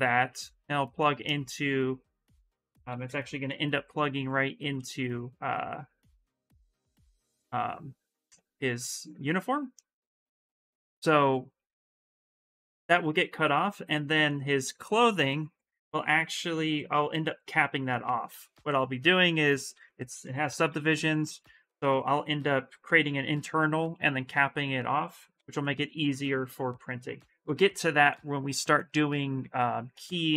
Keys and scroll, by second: 2.2-3.8 typing, 18.2 shift+f, 19.0 s, 20.2 shift+d, 20.6 shift+d, 20.8 shift+d, 25.1-25.7 typing, 27.2 shift+f.